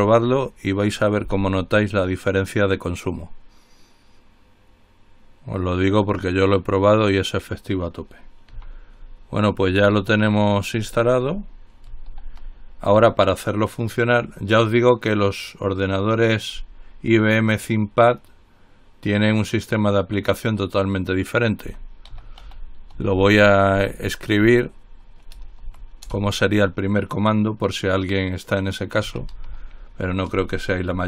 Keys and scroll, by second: 0.0-1.9 typing, 12.5 ctrl+l, 21.7-26.3 typing, 29.1-31.0 typing.